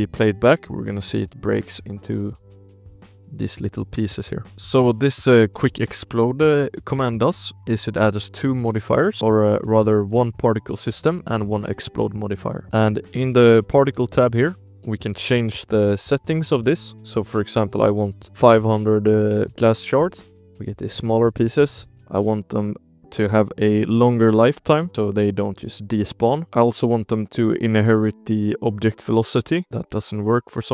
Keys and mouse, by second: 0.0 space, 0.4 click, 0.7 drag, 1.0 z, 1.5 z, 2.1 ctrl+s, 2.3 click, 2.5 space, 4.4 space, 4.7 middle click, 5.2 middle click, 5.9 space, 6.2 click, 7.1 space, 7.6 space, 8.1 click, 8.5 shift+middle drag, 8.7 space, 9.0 space, 9.1 drag, 9.5 shift+drag, 12.6 shift+click, 13.0 click, 13.8 click, 14.8 Right, 15.2 Right, 15.4 Right, 15.8 Right, 16.0 Right, 16.1 Right, 16.3 Right, 16.4 Right, 16.5 Right, 17.0-18.3 drag, 17.9 0, 19.9 click, 20.0 space, 20.1 space, 20.3 space, 20.5 shift+click, 20.7 space, 21.8 space, 21.8 ctrl+s, 22.9-24.9 drag, 24.0 0, 26.1 click, 26.4 space, 26.7 click, 28.5 click, 28.7 space, 29.5 drag, 29.8 space.